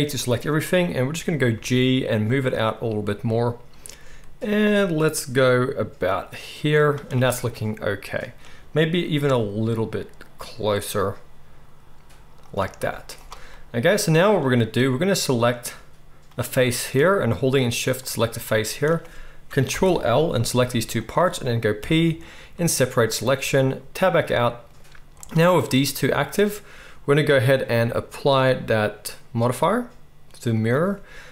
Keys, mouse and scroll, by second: 1.5 g, 9.1 g, 12.5-17.9 middle drag, 12.8 z, 17.9 shift+click, 18.1-25.1 shift+middle drag, 19.6 ctrl+l, 20.5 g, 21.7 p, 23.9 Tab, 25.1 click, 25.2-27.5 middle drag, 27.5-31.3 drag.